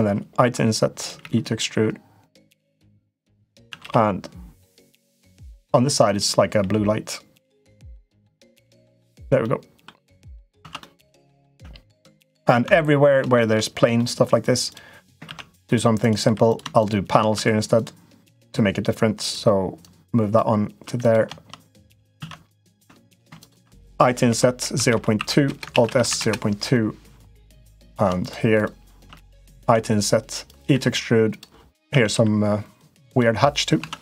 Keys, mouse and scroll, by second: 1.0 e, 2.5 middle click, 3.4 a, 3.6 g, 6.2 g, 9.2 middle click, 10.4 Tab, 10.6 middle click, 11.2 click, 11.3 Tab, 11.8 Tab, 12.4 Tab, 13.1 shift+middle click, 13.7 middle click, 14.4 click, 15.0 ctrl+r, 16.2 3, 16.3 click, 16.6 shift+click, 17.2 2, 17.5 click, 19.6 click, 20.7 3, 20.8 click, 22.0 ctrl+z, 22.8 click, 23.2 shift+click, 24.0 i, 25.5 alt+s, 27.3 click, 27.6 click, 28.0 shift+click, 28.3 click, 29.4 i, 30.5 e, 31.7 a, 31.9 g, 33.6 Tab, 33.8 click.